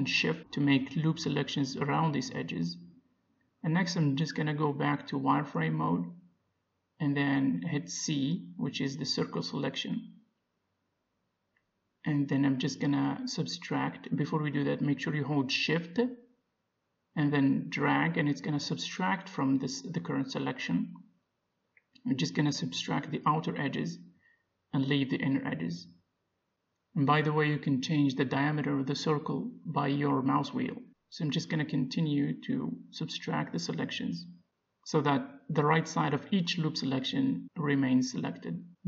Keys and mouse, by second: 1.4-2.6 drag, 3.6-6.8 middle drag, 6.6 z, 7.4-8.7 middle drag, 7.8 c, 8.7-10.7 right drag, 10.7-13.0 middle drag, 11.8 c, 14.9-16.8 right drag, 15.4 ctrl+z, 16.4 c, 23.8-25.7 middle drag, 24.5 c, 28.3-30.2 right drag, 29.0-30.9 middle drag, 29.7 c, 33.8 c, 35.7 middle click, 36.5 c, 37.4 middle click, 38.7 right click.